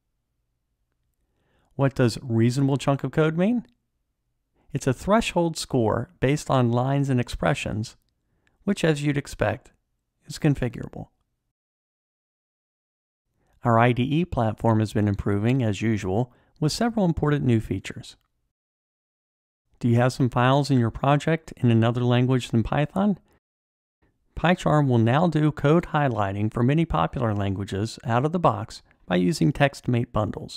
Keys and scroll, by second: 3.3 ctrl+shift+super+a, 27.5 Tab.